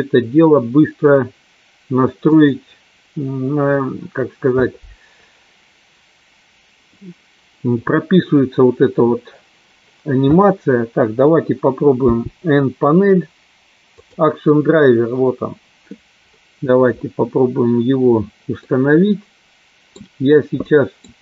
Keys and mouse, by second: 12.1 n, 14.1 click, 18.7-19.9 middle drag, 20.7 middle click.